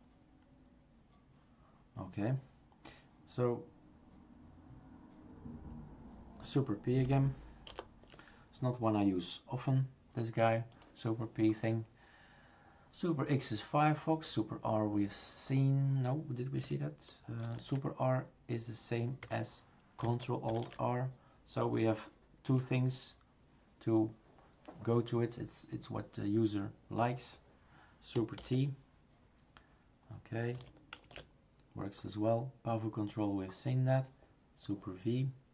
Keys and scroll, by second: 7.7 super+p, 17.4 super+r, 19.3 Escape, 22.5 Escape, 28.4 super+t, 31.1 shift+super+q.